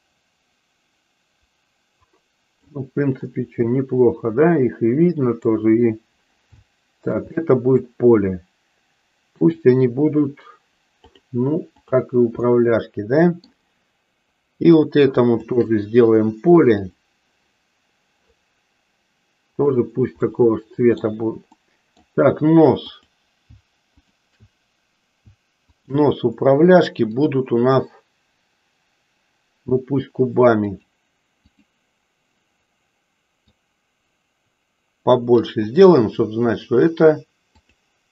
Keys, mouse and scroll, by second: 3.3-5.6 middle drag, 6.7-7.8 shift+middle drag, 11.7 click, 12.5-13.6 middle drag, 14.7 click, 15.3 shift+click, 16.8 click, 19.6 click, 20.3 middle click, 21.6 middle click, 22.8 click, 24.0 shift+click, 25.7 shift+click, 27.2-31.0 drag, 33.6-35.3 drag.